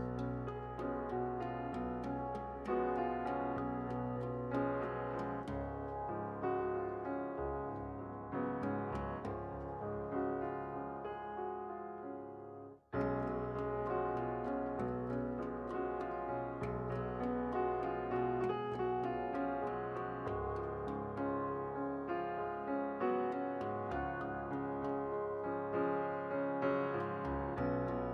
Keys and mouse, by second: 0.0 ctrl+z, 0.6-2.1 drag, 1.7 alt+m, 2.5 alt+m, 3.4-4.8 right drag, 4.5 alt+m, 5.5-6.9 right drag, 6.5 alt+m, 6.9 alt+m, 7.5-8.5 right drag, 8.5 alt+m, 8.8 alt+m, 9.4-10.6 right drag, 10.6 alt+m, 10.9 alt+m, 11.4-12.5 right drag, 12.5 alt+m, 13.1-18.7 right drag, 14.2 alt+m, 16.0 alt+m, 18.7 i, 19.8-20.9 right drag, 20.8-23.0 drag, 21.7 right click, 23.0 shift+s, 24.7 e, 26.1 click, 26.3 middle click, 26.9 e, 27.1 middle click.